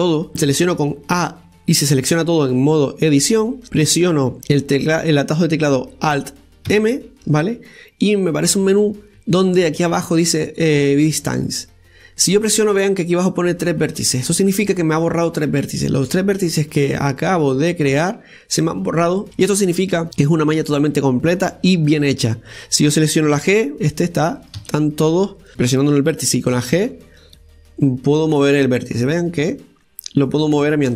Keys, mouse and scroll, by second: 0.3 a, 7.6 alt+m, 19.9 scroll down 2, 20.0-20.9 scroll up 3, 23.3 right click, 24.3 g, 25.3 right click, 25.9 right click, 27.4 g.